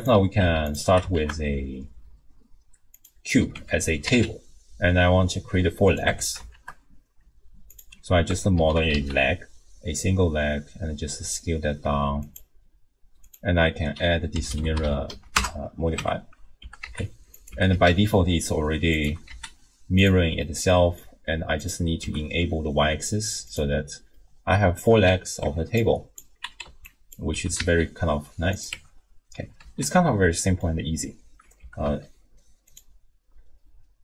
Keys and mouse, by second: 0.0 click, 0.4 x, 1.1 shift+a, 3.6 Tab, 3.9 s, 6.1 Tab, 6.5 shift+a, 8.3 Tab, 8.6 s, 13.4-15.4 drag, 14.7 r, 16.0 Tab, 16.6 g, 17.5 g, 19.1 g, 20.8 click, 21.6 click, 22.0 g, 24.2 click, 25.4 Tab, 25.9 click, 26.6 alt+z, 26.8 click, 27.3 g, 28.7 Tab, 29.6 alt+z, 30.0-30.7 drag, 31.6 g.